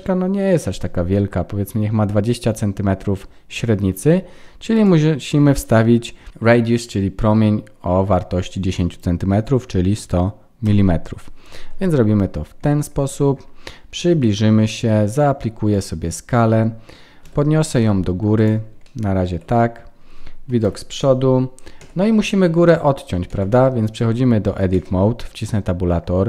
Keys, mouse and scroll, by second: 4.7 click, 6.3 KP_0, 12.1-13.6 scroll up 10, 13.9-14.5 scroll up 2, 14.7 ctrl+a, 18.8 shift+middle click, 20.6 KP_1, 21.8 Tab, 24.7 Tab.